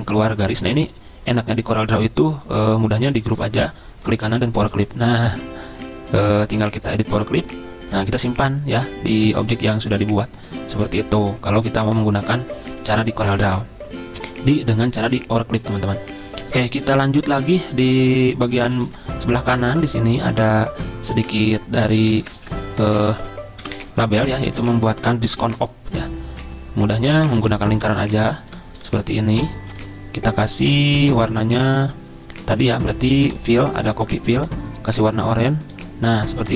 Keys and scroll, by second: 18.8 z, 22.4 ctrl+z, 23.7 Delete, 25.3 Delete.